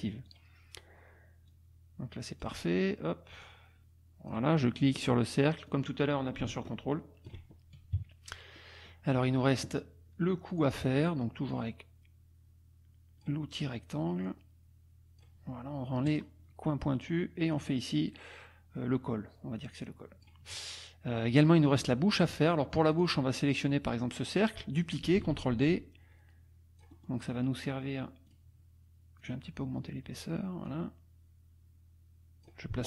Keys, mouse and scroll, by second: 0.3 click, 1.5-2.6 drag, 3.4 click, 5.7-7.4 drag, 8.0 KP_Subtract, 8.5 click, 9.0 middle click, 9.2 KP_Subtract, 10.5 click, 11.5-13.4 drag, 14.3-15.4 drag, 16.1 click, 17.5-20.4 drag, 22.9 click, 24.0 click, 25.3 ctrl+d, 25.6-27.2 ctrl+drag, 28.3 click, 29.2 click, 30.7-32.6 drag.